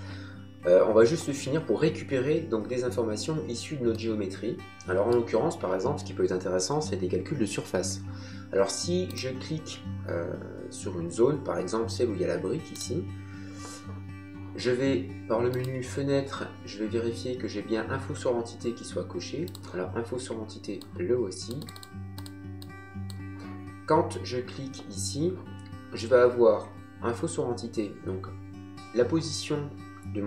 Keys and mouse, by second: 3.9 middle click, 9.0 click, 12.7 click, 15.5 click, 19.5 click.